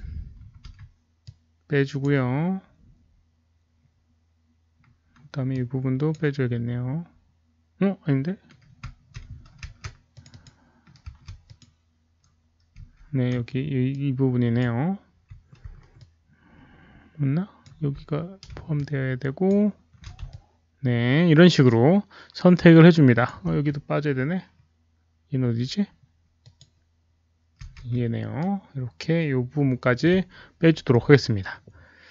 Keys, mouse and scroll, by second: 0.7 alt+middle click, 1.2-2.0 ctrl+drag, 4.3 ctrl+shift+click, 4.3 alt+middle click, 5.5-6.1 ctrl+shift+drag, 5.5 alt+middle click, 8.2 ctrl+shift+click, 8.2 alt+middle click, 10.1 ctrl+z, 10.1 ctrl+shift+click, 10.2 ctrl+click, 11.4 ctrl+click, 12.0 ctrl+z, 12.8 ctrl+z, 13.8-14.5 ctrl+drag, 15.9-17.6 ctrl+alt+drag, 18.7-19.4 ctrl+shift+drag, 20.2-23.2 ctrl+alt+shift+drag, 26.4 ctrl+shift+click, 28.3-29.9 ctrl+shift+drag, 29.5 ctrl+z, 31.0 alt+z, 31.2-32.1 alt+drag.